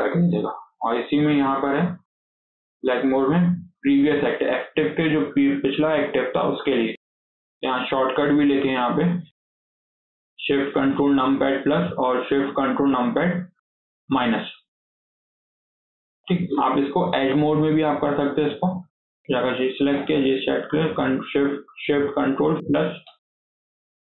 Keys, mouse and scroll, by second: 1.2-4.5 drag, 7.7-10.8 drag, 15.1 scroll down 5, 15.3 shift+middle click, 15.8 middle click, 16.3 scroll up 1, 16.6 middle click, 17.2 2, 17.4 middle click, 17.7 scroll up 2, 17.9-18.9 shift+middle drag, 18.9 shift+click, 19.4 middle click, 20.0 shift+click, 20.4-22.5 middle drag, 22.5 ctrl+shift+KP_Add, 22.9 ctrl+shift+KP_Add, 23.2 ctrl+shift+KP_Add, 23.4 ctrl+shift+KP_Add.